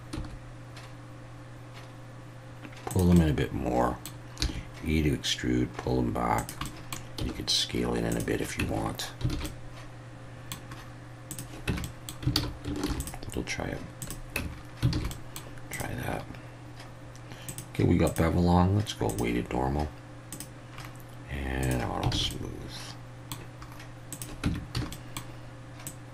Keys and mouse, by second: 0.1 s, 2.9 click, 3.2-4.1 middle drag, 4.4 e, 6.4 click, 6.7 middle click, 7.2 s, 8.1 click, 8.6 Tab, 9.3 alt+a, 9.4-10.5 middle drag, 11.3 click, 11.7 Tab, 11.8 middle click, 12.4 alt+a, 12.9 ctrl+r, 14.0 click, 14.4 Tab, 14.9 alt+a, 15.1 middle drag, 17.5 click, 18.1-19.2 drag, 20.3 click, 21.6 click, 22.1 alt+a, 22.3-23.3 middle drag, 24.4 Tab, 24.7 a, 24.9 middle click, 25.9-26.1 drag.